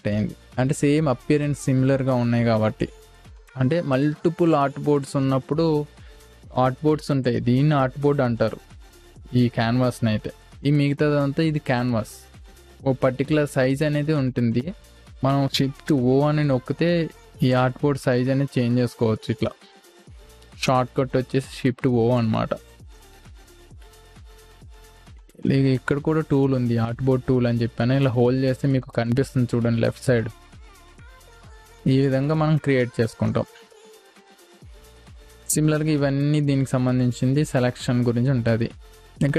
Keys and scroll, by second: 3.3 ctrl+alt+space, 6.4 Delete, 16.3 shift+o, 24.2 ctrl+z, 24.6 v, 32.1 v, 32.3 space.